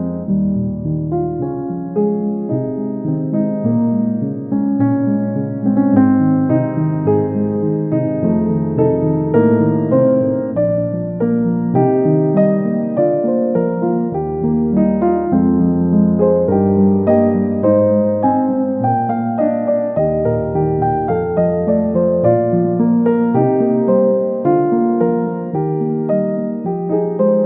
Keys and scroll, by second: 7.6 Up, 7.8 Left, 8.1 Down, 16.6 ctrl+g, 26.6 ctrl+c, 27.0 ctrl+v.